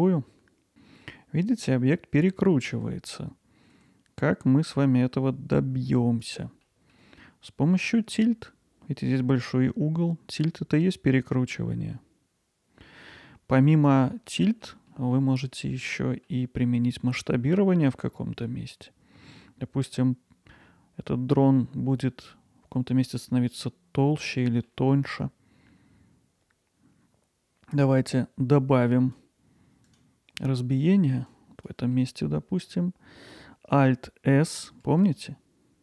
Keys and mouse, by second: 0.7 alt+z, 0.7 Tab, 1.0-2.5 alt+middle drag, 2.5 ctrl+alt+middle click, 6.2 click, 6.6 alt+middle click, 7.9-13.9 drag, 14.3 alt+middle click, 14.9 middle click, 15.4 alt+middle click, 16.0 middle click, 17.9 middle click, 24.0 middle click, 24.5 alt+middle click, 28.6 click, 29.9-30.9 right drag, 31.4 click, 32.1 alt+middle click.